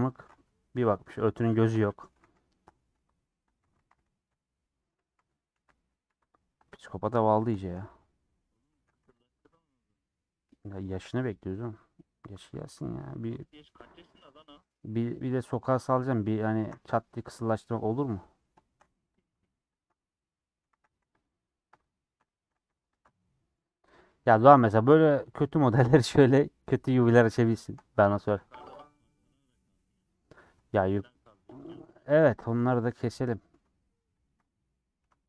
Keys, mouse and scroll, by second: 0.1 u, 0.9-2.2 middle drag, 2.2 3, 2.6 middle click, 2.7-3.4 scroll up 2, 4.3 ;, 5.2 3, 5.5 2, 6.1 3, 6.2 click, 6.5 middle click, 7.8 middle click, 9.9-13.8 middle drag, 12.3 scroll down 1, 13.8 scroll down 3, 14.1-15.4 middle drag, 15.8 alt+click, 17.5 middle click, 18.7 shift+middle click, 19.2 click, 19.8 ctrl+click, 20.4 middle click, 20.8 a, 21.2 click, 22.4 a, 23.0 u, 24.5 scroll up 2, 24.7-26.9 middle drag, 26.9 scroll up 3, 27.0 scroll down 1, 27.1-28.8 middle drag, 28.8 click, 29.1 scroll down 1, 30.1 click, 31.6 ctrl+click, 32.3 middle click, 33.0 click, 33.3 middle click, 34.2 ctrl+click, 34.8-35.2 middle drag.